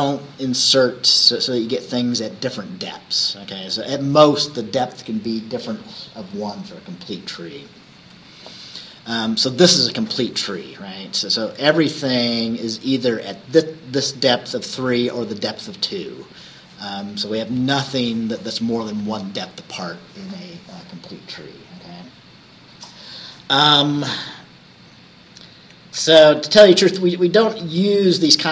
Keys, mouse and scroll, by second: 8.2 Right, 25.7 Right, 26.4 Left, 27.6 Left.